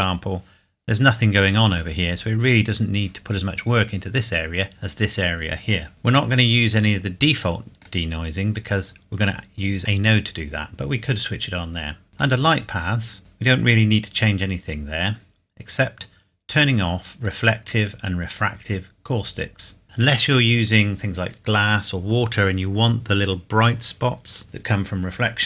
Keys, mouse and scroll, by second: 5.9 click, 7.8 click, 12.1 click, 14.9-15.3 scroll down 1, 17.2 click.